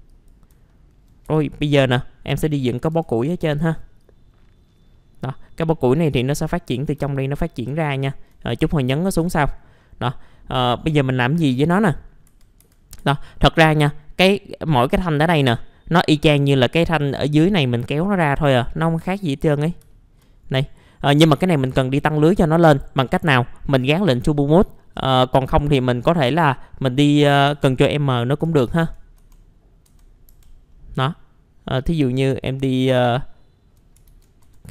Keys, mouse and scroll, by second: 0.1 click, 0.7 alt+middle click, 1.2 F4, 1.8 middle click, 2.9 F11, 3.4-3.8 scroll up 1, 4.0-7.0 drag, 7.1 alt+middle click, 7.5-7.9 scroll down 1, 8.1 alt+middle click, 8.9-9.2 scroll up 1, 9.2 F4, 9.5-9.8 scroll up 1, 9.8 middle click, 12.0 scroll up 1, 12.2 F4, 13.3 click, 15.6-15.9 scroll down 1, 15.9-18.5 middle drag, 18.5-19.1 scroll up 1, 19.1 click, 19.9 alt+middle click, 20.4 scroll up 1, 20.7 middle click, 23.8 click, 27.5 F3, 28.7 ctrl+z, 29.7 scroll up 1, 30.3 F3, 30.7 middle click, 31.8 click, 32.6 alt+middle click, 34.1 ctrl+z.